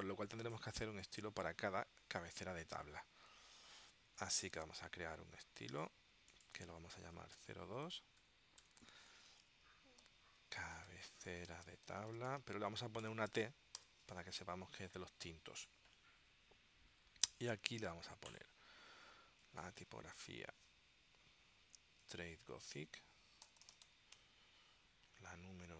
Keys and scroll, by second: 2.8 super+Tab, 7.5-13.9 typing, 23.3-24.5 typing.